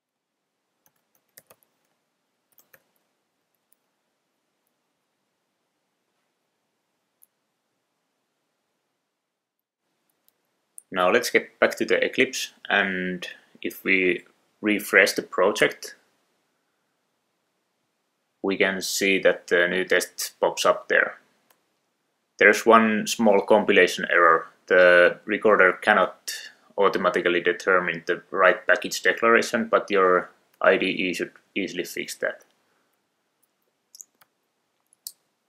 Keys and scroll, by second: 10.4 super+Tab, 20.4 Right, 21.0 Down, 21.6 Return, 30.7 Return, 33.0 shift+super+o, 34.4 super+s.